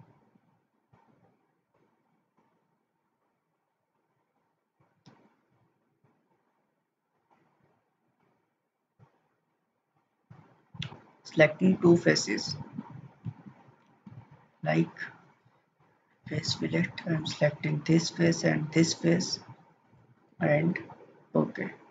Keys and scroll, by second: 14.1 ctrl+z.